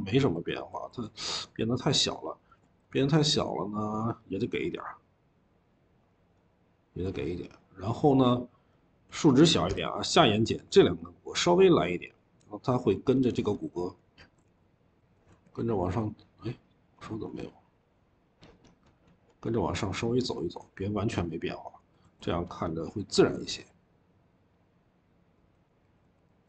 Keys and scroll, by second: 0.4-2.3 typing, 7.9-8.6 typing, 14.8 l, 15.2 e, 25.6-26.4 typing.